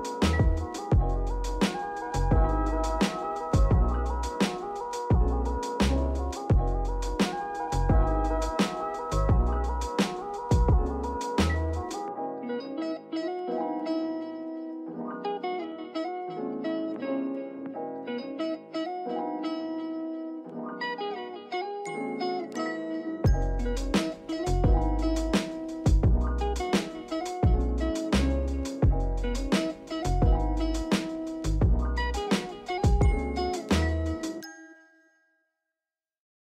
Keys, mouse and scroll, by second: 0.4-1.7 drag, 1.7 scroll down 2, 1.9-2.5 scroll up 2, 2.1 shift+middle drag, 2.5 click, 3.1 click, 5.0 click, 5.4 click, 6.7-7.8 drag, 8.1-9.6 drag, 10.1 click, 11.4-13.0 drag, 13.8 click, 14.2 click, 15.4-17.0 drag, 17.1 click, 17.5-17.8 drag, 20.2 click, 20.7 click, 21.4-21.8 drag, 22.9 click, 23.3 click, 23.8-24.4 drag, 25.9 click, 26.3-26.7 drag, 28.0 click, 29.3 click, 29.7 click, 31.5 drag, 31.9 click, 32.3 click, 33.3-34.0 drag, 34.4-35.3 drag.